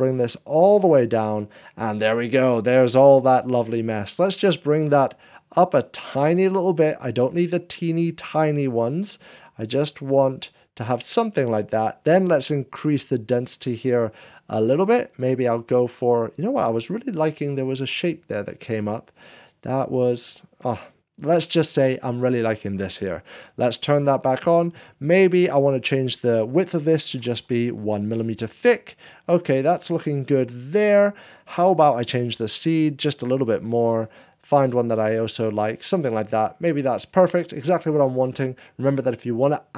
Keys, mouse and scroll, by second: 5.5-27.1 drag, 27.1 1, 27.4 Return, 27.4-29.0 drag, 28.7 middle click, 29.3-31.5 drag, 33.3 click, 36.4 middle click, 36.5 click, 36.8 click.